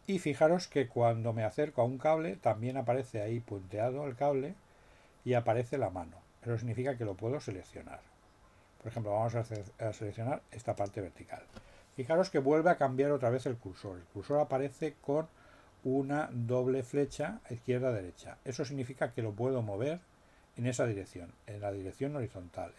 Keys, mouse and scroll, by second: 10.7 click.